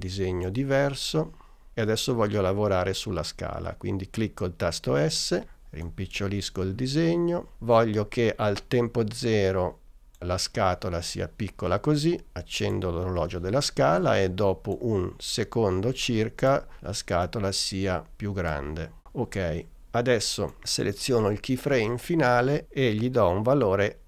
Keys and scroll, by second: 4.9 s.